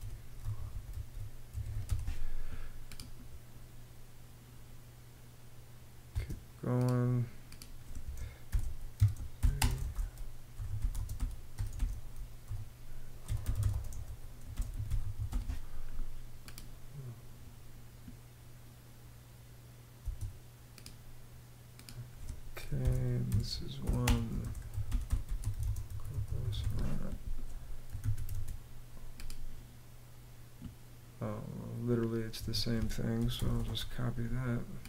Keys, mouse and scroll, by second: 0.0-1.9 typing, 5.7 space, 7.8-15.4 typing, 19.6 space, 22.4-26.8 typing, 27.5 super+a, 27.9 super+c, 31.9 Escape, 32.7-33.6 typing.